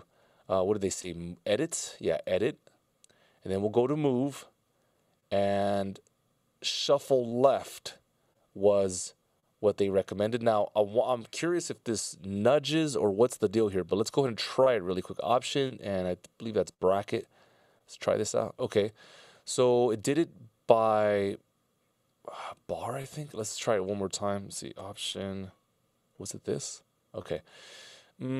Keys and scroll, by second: 19.3 super+z, 26.2 alt+[, 27.4 alt+].